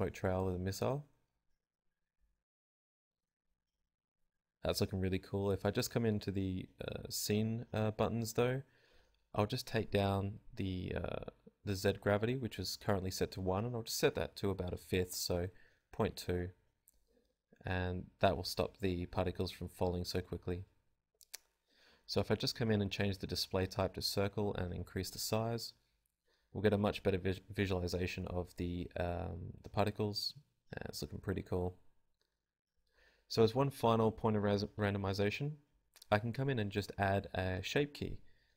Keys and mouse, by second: 6.3 alt+a, 7.7-9.6 drag, 11.8-12.8 drag, 12.1 alt+a, 17.8 alt+a, 18.4 click, 23.4-24.5 drag, 24.4 alt+a, 24.7 click, 25.5 click, 26.5 alt+a, 26.7 z, 26.8 click, 28.5 click, 28.9 alt+a, 29.2 z, 30.4 alt+a, 30.5-36.0 drag.